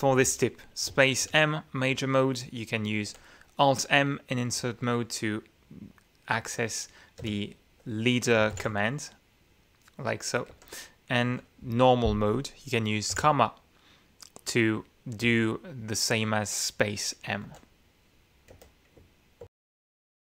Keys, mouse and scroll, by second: 0.9 space, 1.3 m, 3.1 Escape, 4.6 q, 7.3 shift+i, 8.6 alt+m, 10.5 Escape, 11.3 Escape, 11.7 k, 14.0 ,, 18.3 Escape, 19.4 Escape.